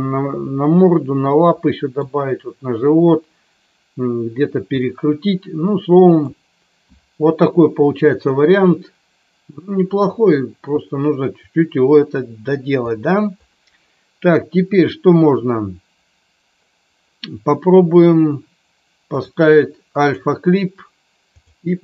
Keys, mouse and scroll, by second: 1.6-2.1 middle drag, 4.8-6.2 middle drag, 19.2-20.1 drag, 21.3-21.8 drag.